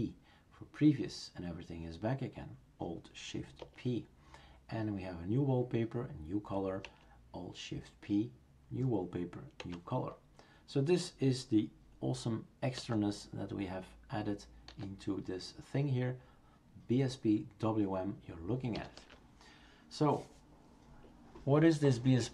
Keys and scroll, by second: 3.6 alt+shift+p, 6.8 alt+shift+p, 9.6 alt+shift+p, 12.8 alt+shift+n, 14.7 alt+shift+n, 18.8 alt+shift+n.